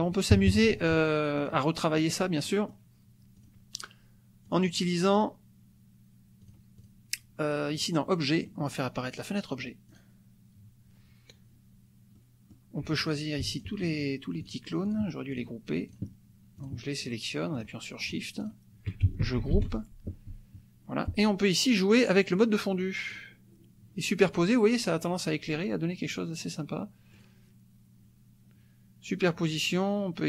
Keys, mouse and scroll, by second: 0.3 KP_Subtract, 1.3 click, 1.9 click, 2.5 click, 3.4 drag, 4.4 click, 5.2 click, 6.4 click, 7.8 click, 8.3 click, 10.0-10.7 drag, 12.1 click, 13.0 click, 13.5 shift+click, 13.9 shift+click, 14.4 shift+drag, 14.8 shift+drag, 15.3 shift+click, 15.9 shift+click, 16.6 shift+click, 17.0 shift+click, 17.6 shift+drag, 18.0 shift+drag, 18.4 shift+click, 19.5 ctrl+g, 22.1-23.3 drag, 26.1 click, 27.1 click.